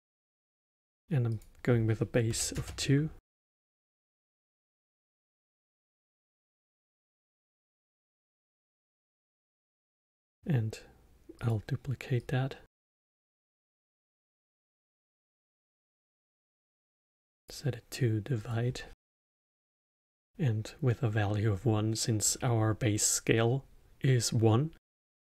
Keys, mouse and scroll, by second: 1.2-4.3 drag, 6.6-8.3 middle drag, 8.3 click, 9.6 shift+d, 12.1 click, 13.2 click, 14.1 click, 15.8-20.8 drag, 20.8-23.8 middle drag.